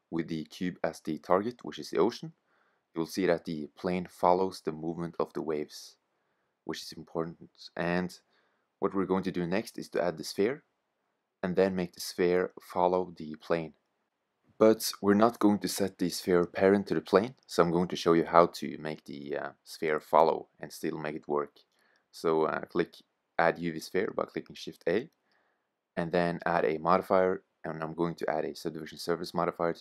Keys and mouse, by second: 2.4-4.4 drag, 4.7 middle drag, 5.0 click, 5.1 middle click, 5.2 click, 5.6-8.7 middle drag, 12.7-15.0 drag, 18.7 shift+a, 26.0-27.7 drag.